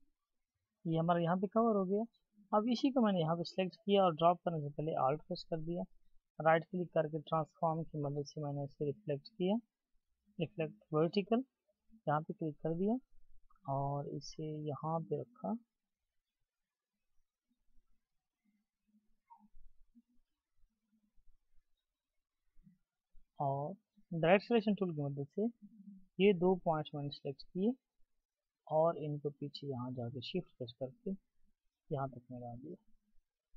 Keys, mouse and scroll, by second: 6.0 right click, 6.0 double click, 27.9 shift+click.